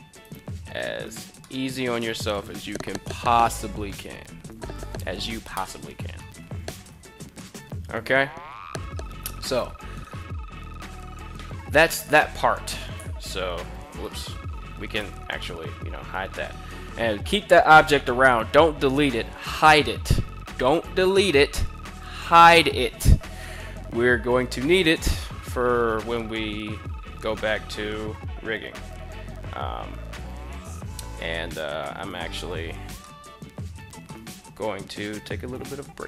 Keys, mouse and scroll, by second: 0.2 Tab, 0.5 click, 1.1 middle click, 1.4 middle click, 5.9 middle click, 6.4 a, 6.6 a, 6.8 middle click, 7.7 middle click, 9.1 KP_1, 11.3 Tab, 12.4 g, 13.6 right click, 14.5 h, 14.8-17.1 middle drag, 17.2-22.3 middle drag, 25.7 KP_1, 32.6 shift+middle click, 33.6-33.9 shift+middle drag.